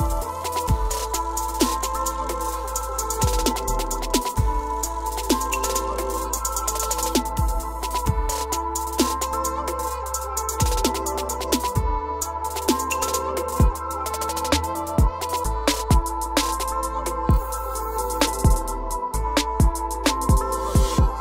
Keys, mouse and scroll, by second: 0.6 click, 1.8-2.9 drag, 3.7 click, 7.6 o, 8.4 click, 10.0 click, 10.9 click, 13.9 click, 14.7-15.9 scroll, 18.6 click, 18.8-19.6 scroll down 22, 20.5 click.